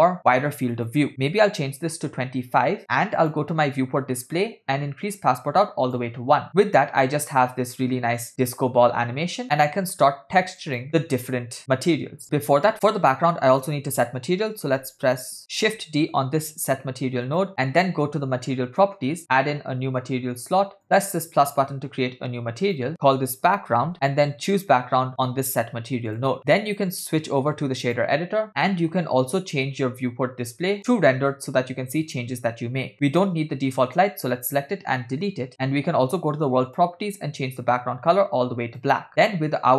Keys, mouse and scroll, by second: 0.8-2.1 drag, 3.2 click, 4.4-5.0 scroll down 4, 5.1 click, 6.6 space, 9.4 space, 9.8 space, 10.1 space, 10.7 click, 12.9 scroll down 2, 13.1 scroll down 1, 13.6 click, 15.8 shift+d, 17.6 click, 17.6 scroll up 3, 18.7 click, 19.7 scroll up 2, 21.4-22.2 drag, 22.7-23.9 shift+drag, 24.6-26.4 drag, 26.7-28.2 drag, 28.5 middle click, 31.2 click, 33.1 click, 35.1 Delete, 39.2 click.